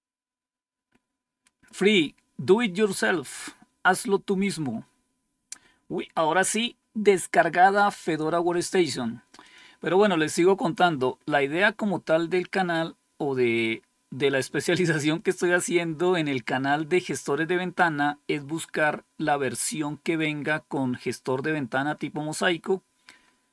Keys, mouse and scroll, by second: 9.3 click, 18.2-19.1 scroll down 3, 19.6-20.1 scroll down 2, 20.4-23.5 scroll down 9.